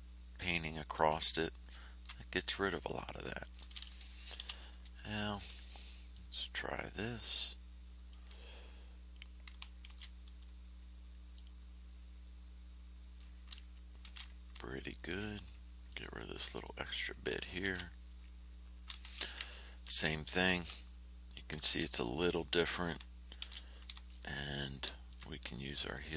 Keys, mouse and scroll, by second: 1.2 ctrl+scroll down 2, 2.4 ctrl+click, 4.4 r, 5.0 ctrl+scroll up 2, 6.1-8.3 drag, 9.8 ctrl+shift+f, 11.3 click, 14.0 ctrl+shift+a, 14.9 ctrl+scroll up 2, 15.8 click, 17.6 ctrl+f, 19.0 ctrl+shift+a, 19.6 ctrl+shift+scroll down 3, 21.6 shift+f, 23.4 shift+h, 24.4 ctrl+shift+scroll up 2, 25.0 ctrl+shift+click, 25.6-26.1 drag.